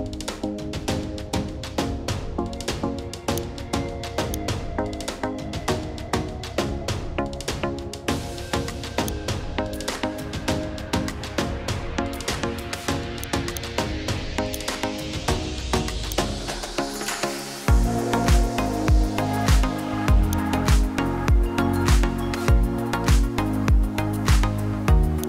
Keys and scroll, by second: 6.8 ctrl+h, 7.3 ctrl+h, 17.7 Left, 18.1 Left, 18.4 Left, 18.7 Left, 19.5 Up, 19.8 Up.